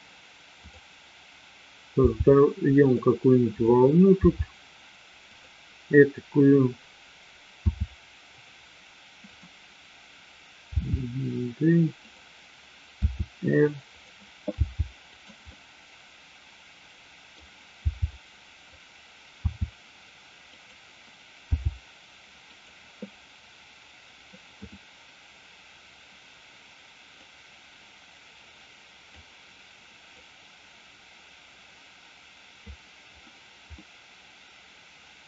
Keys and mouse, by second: 0.5 click, 1.9 g, 3.4 click, 4.5 g, 7.6 r, 10.8 g, 12.9 r, 14.6 g, 15.4-17.3 middle drag, 17.6 g, 19.4 r, 20.5 click, 21.4 g, 24.4-25.2 drag, 27.2-29.2 drag, 30.2-32.6 drag, 33.8-35.2 middle drag.